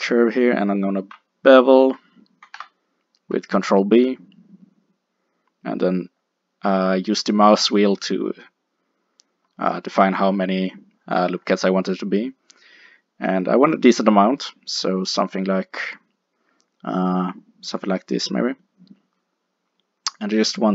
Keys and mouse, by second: 2.5 ctrl+b, 20.2 click.